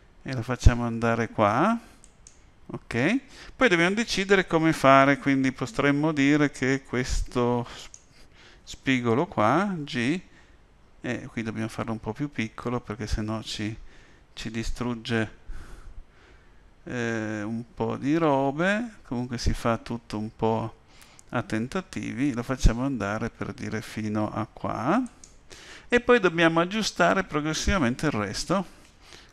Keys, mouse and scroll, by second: 7.8 click, 9.8 g, 29.2 a.